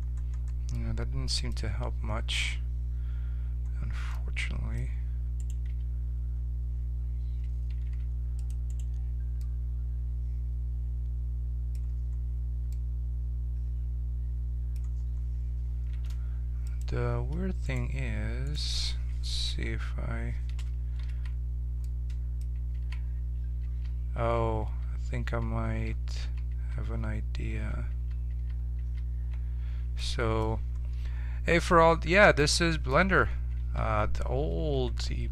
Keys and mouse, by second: 5.4 right click, 5.7 Tab, 7.8 ctrl+Tab, 8.7-10.1 drag, 10.1 middle click, 15.9 ctrl+Tab, 21.1 ctrl+z, 21.1 j, 22.7 ctrl+z, 23.6 ctrl+z, 24.2 ctrl+z, 24.6 ctrl+z, 25.2 ctrl+z, 25.6 ctrl+z, 26.2 ctrl+z, 26.5 ctrl+z, 27.5 ctrl+z, 27.9 ctrl+z, 28.3 ctrl+z, 28.8 ctrl+z, 30.0-32.0 middle drag, 32.4-34.7 middle drag, 34.7 ctrl+Tab.